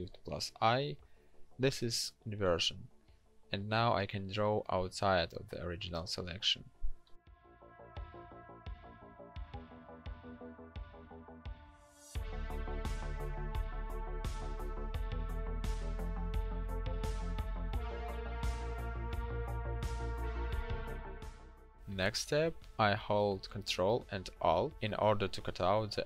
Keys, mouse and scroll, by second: 0.6 ctrl+shift+n, 16.4 ctrl+shift+x, 25.1 ctrl+alt+click.